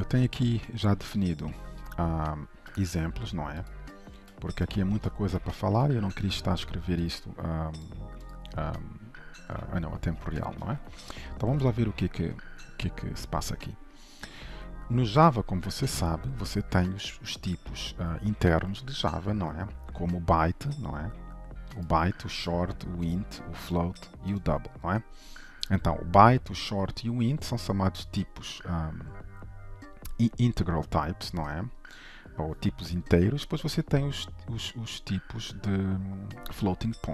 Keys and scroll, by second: 4.0 ctrl+b, 5.3 ctrl+shift+F12.